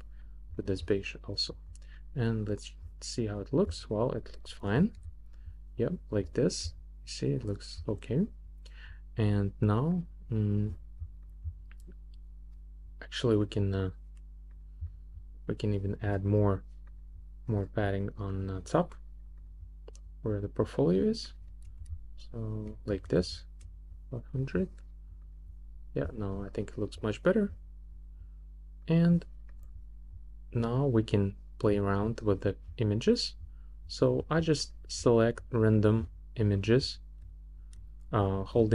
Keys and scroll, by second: 21.9 shift+Up.